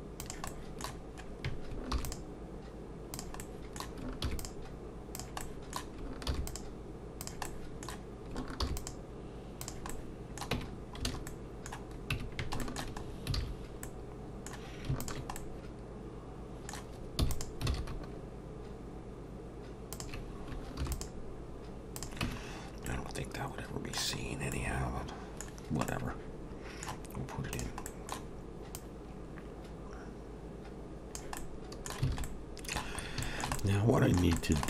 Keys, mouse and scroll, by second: 0.5 middle click, 3.4 middle click, 4.2 ctrl+r, 5.4 middle click, 6.3 ctrl+r, 7.5 middle click, 8.6 ctrl+r, 9.9 middle click, 10.5 Tab, 10.7-11.0 scroll down 2, 11.3 middle click, 12.1 Tab, 12.6 shift+middle click, 13.0 scroll up 3, 13.4 alt+a, 13.8 middle click, 15.0 alt+shift+click, 15.4 middle click, 17.2 e, 17.7 alt+s, 20.8 ctrl+r, 22.2 Tab, 22.5-22.9 scroll down 2, 22.9 middle click, 24.2 scroll down 2, 24.5 middle click, 25.6-25.9 scroll down 1, 25.9 middle click, 27.9 middle click, 27.9 click, 28.7 click, 31.4 middle click, 32.1 alt+a, 32.2 middle click, 33.0 scroll up 2, 33.2 shift+middle click, 33.5 middle click.